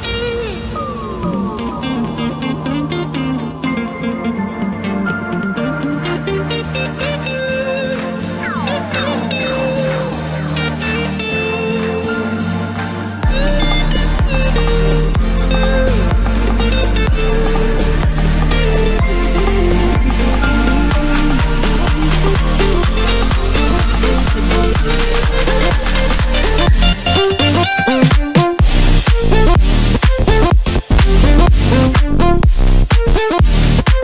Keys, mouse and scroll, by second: 0.1-0.6 drag, 1.0-1.5 drag, 2.0 drag, 5.7 click, 6.7-9.6 drag, 10.2 click, 11.4 click, 12.3-12.7 scroll down 4, 12.7-14.4 scroll up 1, 14.4 ctrl+KP_2, 14.7-15.2 ctrl+KP_2, 15.4 ctrl+KP_2, 16.6-18.5 scroll down 8, 19.2 ctrl+KP_1, 21.4 KP_3, 22.6 KP_1, 25.7-27.4 drag, 29.2-32.2 drag, 33.4 s.